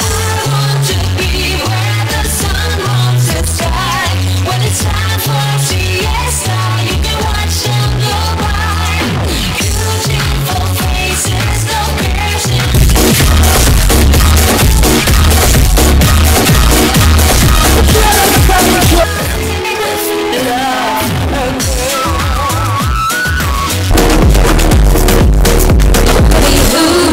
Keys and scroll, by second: 18.9 Page_Down.